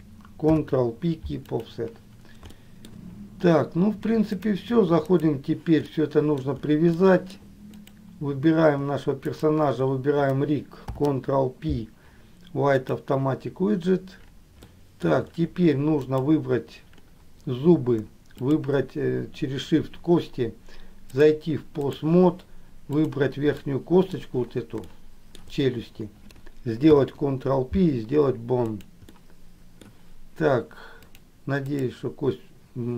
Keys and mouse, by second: 0.7 ctrl+p, 2.8 shift+middle click, 4.4-5.6 drag, 6.2 middle click, 7.1 shift+middle click, 7.9 click, 11.0 ctrl+p, 14.9 shift+middle click, 16.3 click, 18.5 shift+click, 21.3 click, 23.0 click, 23.8 middle click, 25.1 shift+middle click, 27.0 ctrl+p, 29.3 middle click, 31.3-32.9 drag.